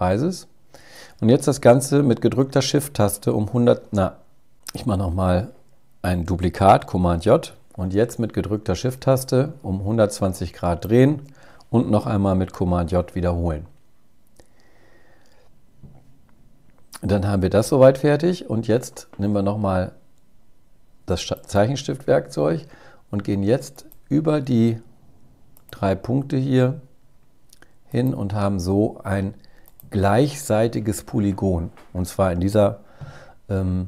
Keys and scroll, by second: 6.0 super+j, 11.5 super+j.